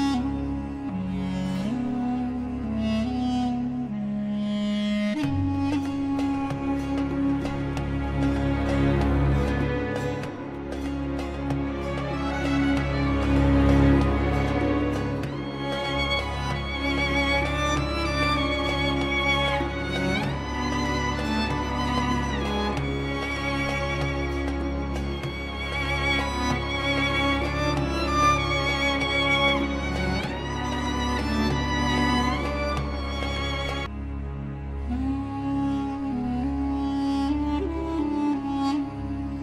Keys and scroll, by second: 0.8 Escape, 5.9 shift+F2, 7.1 shift+Page_Up, 10.9 shift+Page_Up, 11.5 F3, 16.1 F4, 16.7 Escape, 25.8 ctrl+shift+a, 35.8 5.